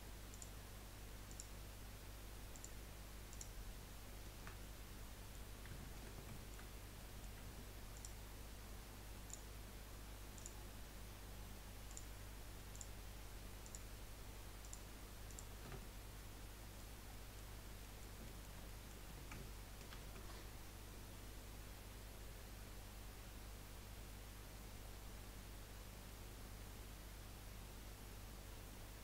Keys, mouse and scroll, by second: 0.3 alt+shift+click, 1.3 alt+shift+click, 2.5 alt+shift+click, 3.3 alt+shift+click, 4.6-6.7 middle drag, 6.7-7.1 scroll up 2, 7.1 middle click, 7.9 alt+shift+click, 9.2 alt+shift+click, 10.3 alt+shift+click, 11.9 alt+shift+click, 12.7 alt+shift+click, 13.6 alt+shift+click, 14.6 alt+shift+click, 15.3 alt+shift+click, 15.8-17.6 middle drag, 17.6 scroll down 2, 17.8-18.4 scroll up 2, 17.9 middle click, 18.4-19.9 shift+middle drag, 19.9 ctrl+b.